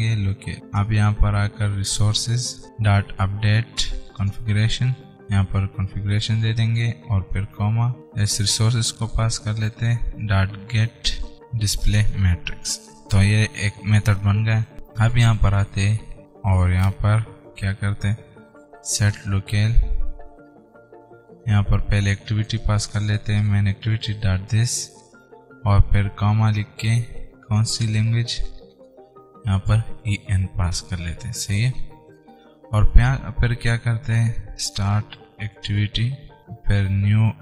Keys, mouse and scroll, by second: 0.0-3.8 typing, 1.3 Return, 4.4 Return, 5.1 alt+Tab, 5.2-9.2 typing, 6.9 Return, 8.0 alt+Tab, 10.0 Return, 10.5-12.0 typing, 12.1 Return, 14.7 scroll up 1.